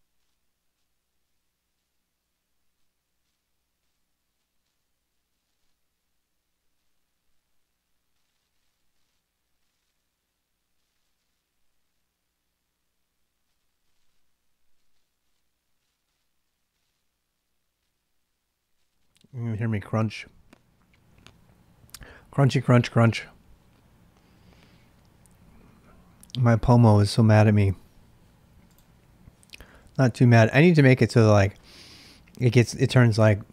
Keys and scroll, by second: 6.6 ctrl+alt+i, 29.8 ctrl+a, 29.9 ctrl+a.